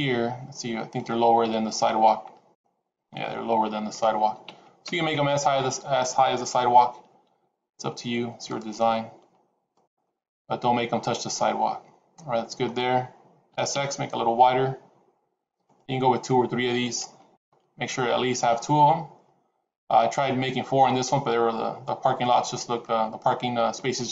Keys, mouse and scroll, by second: 7.2 s, 8.7 g, 9.9 middle click, 10.8-11.3 scroll up 4, 11.3 middle click, 13.4 s.